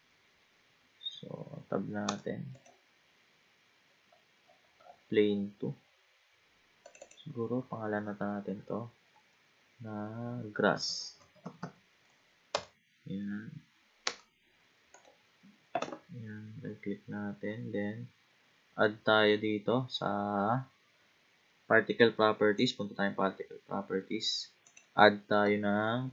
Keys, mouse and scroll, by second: 2.1 Tab, 2.6 click, 3.8-5.8 scroll down 17, 6.8 click, 7.1-10.1 drag, 11.6 s, 14.1 Tab, 14.9 click, 15.8 a, 22.6 click, 24.6-26.1 drag.